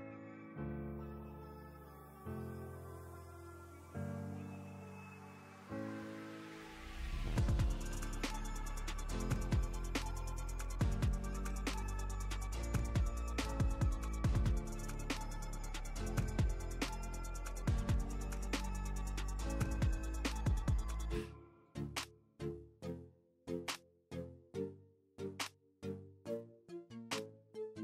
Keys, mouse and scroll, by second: 1.0 click, 3.1 Up, 4.1 Down, 5.6-6.2 click, 9.2 right click, 10.1 click, 13.1-15.8 drag, 16.5 v, 17.9 space, 18.0 click, 18.2 space, 18.5-18.8 ctrl+click, 19.5-20.2 click, 20.5 space, 21.0 ctrl+click, 21.1 ctrl+space, 21.5-22.0 click, 21.7 space, 22.5 click, 23.2 ctrl+2, 23.6-27.8 drag.